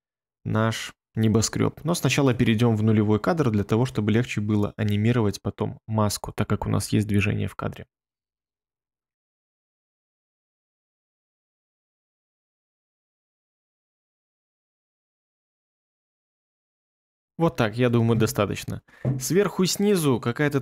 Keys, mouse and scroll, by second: 8.3-9.0 ctrl+scroll, 9.4 ctrl+middle click, 9.7 ctrl+scroll, 10.8-11.2 ctrl+scroll, 12.2 ctrl+scroll, 13.3 ctrl+middle click, 15.8 ctrl+scroll, 16.4-17.1 ctrl+scroll.